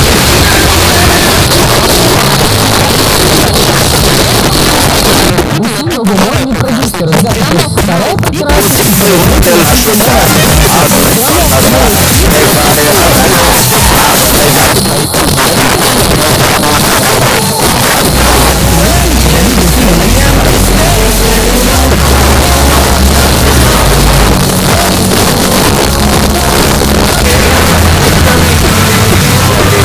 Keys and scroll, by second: 1.4 Page_Down, 14.6 Page_Down, 24.4 Page_Down.